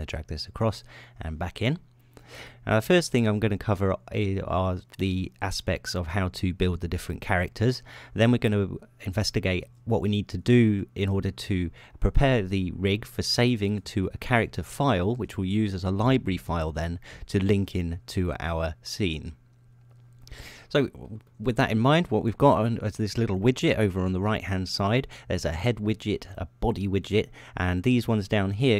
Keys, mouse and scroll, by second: 0.0-1.4 drag, 2.3 middle click, 21.2 click, 21.7 ○, 24.0 shift+○, 24.0 shift+click.